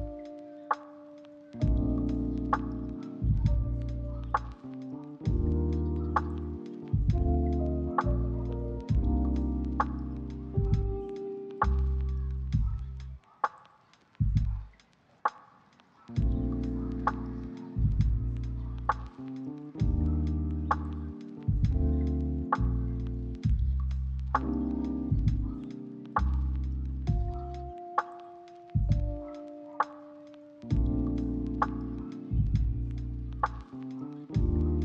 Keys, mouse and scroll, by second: 0.2 double click, 0.6 middle click, 1.4 double click, 2.4 middle click, 4.6 double click, 5.2 middle click, 5.5 double click, 5.8 ctrl+middle click, 6.8 double click, 7.3 middle click, 8.5 shift+middle click, 8.7 ctrl+middle click, 9.3 s, 9.7 right click, 10.6 double click, 14.6 middle click, 17.7 double click, 18.0 middle click, 18.5 double click, 19.8 ctrl+middle click, 20.0 middle click, 20.2 ctrl+middle click, 20.4 shift+middle click, 20.6 middle click, 21.1 middle click, 22.9 1, 23.8 r, 24.4 ctrl+click, 24.7 g, 25.0 ctrl+click, 27.6 middle click, 30.1 s, 30.8 double click, 31.8 middle click, 32.2 double click, 33.1 middle click, 33.8 double click.